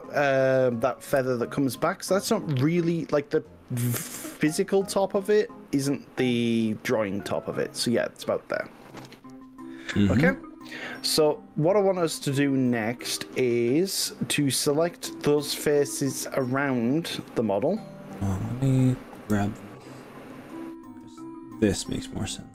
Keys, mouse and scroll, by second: 0.8 click, 1.2 ctrl+z, 1.8 e, 4.8 click, 16.6 click, 19.2 g.